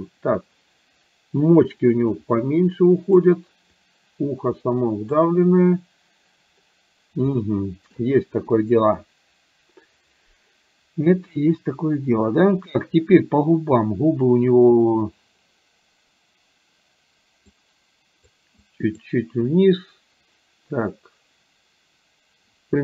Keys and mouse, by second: 2.3 click, 3.8-5.2 drag, 7.4 shift+middle click, 17.6 click, 18.7 click.